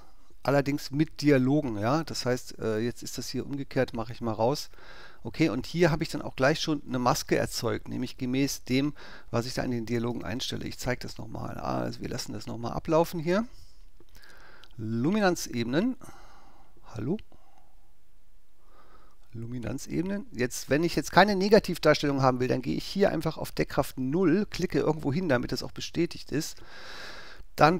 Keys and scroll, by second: 10.1 alt+BackSpace.